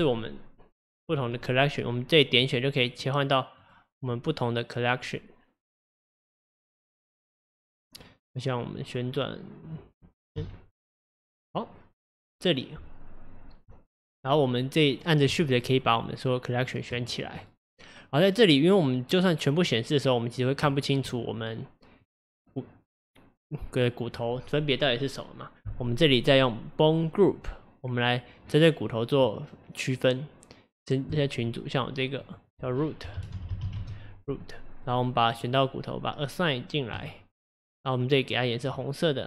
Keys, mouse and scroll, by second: 1.1 click, 2.5 click, 2.9 click, 3.7 click, 4.0 click, 5.1 click, 6.1 click, 10.4 m, 15.0 click, 15.6 shift+click, 15.9 shift+click, 16.7 shift+click, 17.5-20.5 middle drag, 20.7-26.1 shift+middle drag, 27.2-28.9 drag, 28.9-31.1 middle drag, 31.1-32.3 drag, 32.3-33.5 drag, 33.5 o, 34.9 click, 35.4 click, 36.9-37.6 drag, 38.7-39.2 drag.